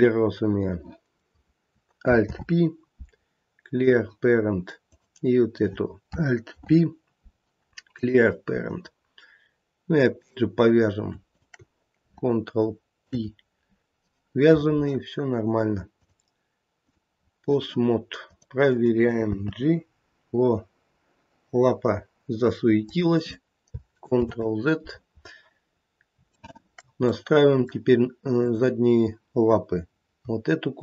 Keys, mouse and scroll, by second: 2.2 alt+p, 4.8 click, 6.5 alt+p, 10.1 click, 11.2 shift+click, 13.0 ctrl+p, 15.9 click, 18.2 click, 19.5 g, 24.2 ctrl+z, 25.7-26.0 scroll down 2, 26.4 shift+middle click, 27.1 middle click, 27.6 middle click, 28.3 click, 30.7 shift+click.